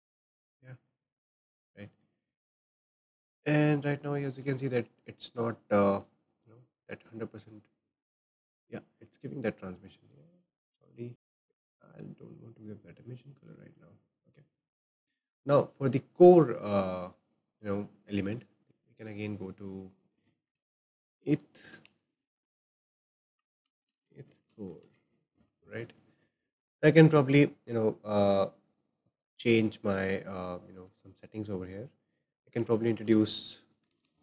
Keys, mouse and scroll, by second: 0.8 click, 1.8-3.5 shift+middle drag, 3.5 scroll down 2, 4.1-6.9 shift+middle drag, 6.9-11.1 drag, 11.1-12.7 shift+middle drag, 11.7 click, 12.7 click, 13.5 click, 14.2 click, 16.2 click, 18.3-25.0 drag, 25.9 click, 26.1-26.7 scroll down 4, 26.6-29.6 shift+middle drag, 33.1 click, 33.9 shift+a.